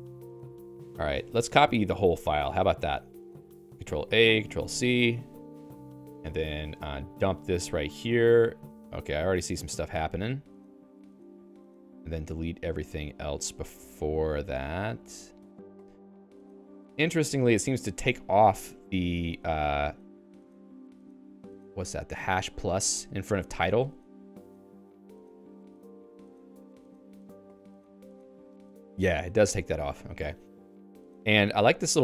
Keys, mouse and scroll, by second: 5.2 k, 6.2-7.4 j, 7.9 p, 8.4 k, 10.9-18.0 typing, 29.9-32.0 typing.